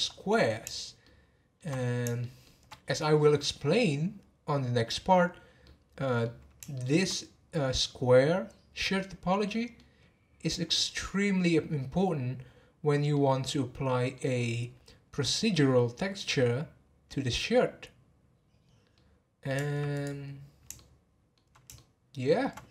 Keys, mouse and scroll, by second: 1.7-2.2 scroll down 3, 2.2-5.3 shift+middle drag, 5.6-12.5 middle drag, 13.1-16.3 middle drag, 18.3-18.9 scroll down 5, 18.9-19.9 middle drag, 19.9 click, 20.2 scroll up 2, 20.7-22.7 shift+middle drag.